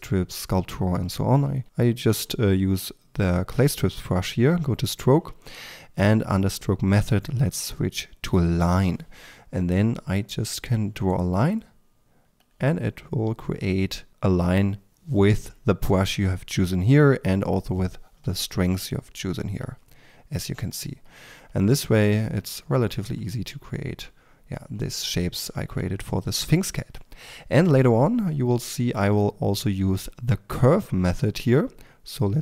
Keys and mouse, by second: 2.0 f, 4.6-13.5 drag, 13.5-17.3 middle drag, 17.3-18.3 drag, 18.3-30.1 middle drag, 30.1-32.4 drag.